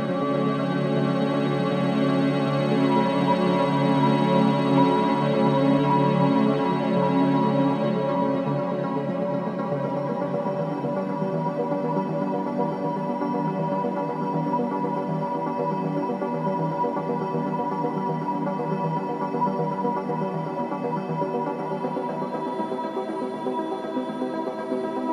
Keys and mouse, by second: 0.0 click, 5.4 click, 6.8 Delete, 7.5 click, 8.1 click, 8.9 click, 9.4 click, 10.5 click, 11.7 g, 14.4 click, 15.4 s, 16.4 click, 17.7 g, 22.4 click, 23.4-24.6 alt+drag, 24.6 g, 24.7 y.